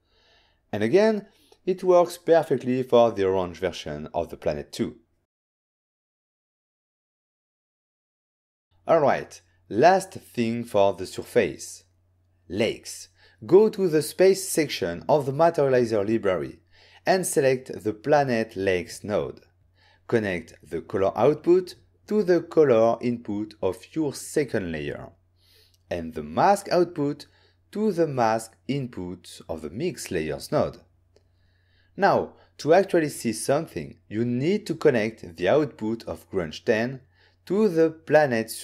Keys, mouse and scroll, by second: 0.3 middle click, 0.3 click, 1.1 m, 2.6 ctrl+shift+click, 8.6 n, 8.7 click, 9.8 click, 11.9 click, 12.8 click, 15.2 click, 16.6 click, 27.6 click, 33.5 middle click, 37.0 click.